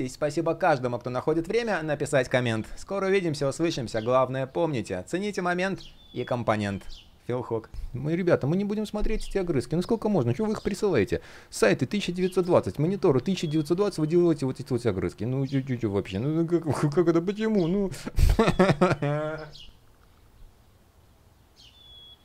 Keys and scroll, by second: 9.7 super+\, 13.2 shift+p.